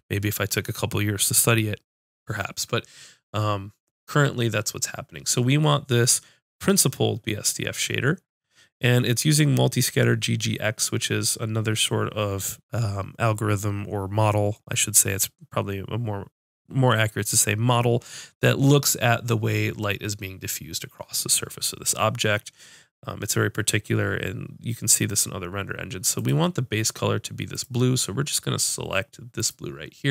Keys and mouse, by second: 26.1-30.1 drag.